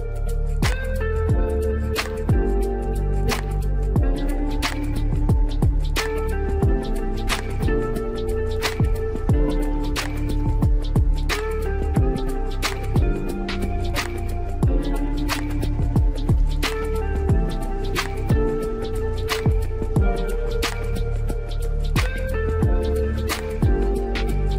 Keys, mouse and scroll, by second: 0.9 s, 3.5-3.9 scroll up 1, 3.9-5.5 shift+middle drag, 5.5 click, 10.6 scroll down 1, 10.9-13.9 middle drag, 14.0-14.8 middle drag, 14.8-15.7 scroll up 1, 15.7-16.3 scroll up 1, 16.3 click, 17.2-17.5 scroll down 1, 17.5-18.4 middle drag, 18.4-19.7 scroll down 1, 19.7 click, 21.8-22.6 drag.